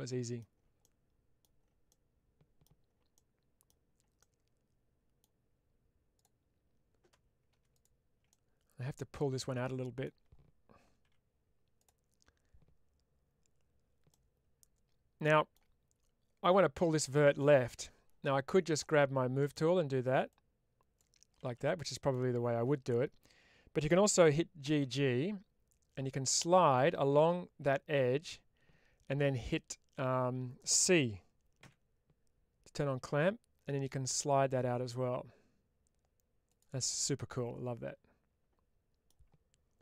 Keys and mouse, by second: 0.8 middle click, 1.8 middle click, 3.1 middle click, 4.1-5.1 middle drag, 6.0 click, 8.2-9.9 middle drag, 10.9 1, 11.7 click, 14.0-15.4 middle drag, 18.6 click, 19.3 middle click, 20.2 click, 21.8 middle click, 36.4 click, 36.9-39.0 middle drag.